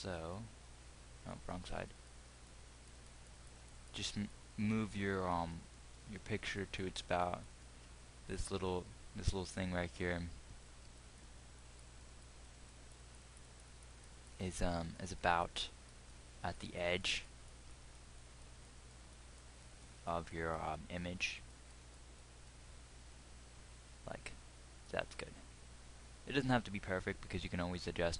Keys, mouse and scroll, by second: 26.9-28.1 drag.